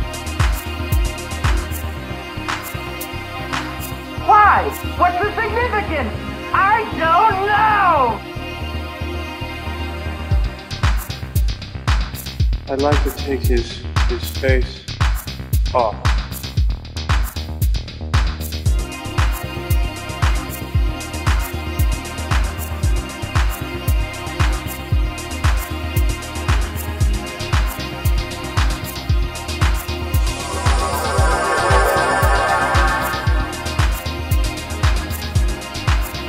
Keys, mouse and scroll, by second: 1.4-2.1 middle drag, 4.1-5.5 middle drag, 6.2 middle click, 7.3 shift+click, 10.7-12.0 middle drag, 12.8 shift+middle click, 14.8-16.1 shift+middle drag, 16.1 g, 16.6 z, 18.6-19.6 drag, 31.6 click.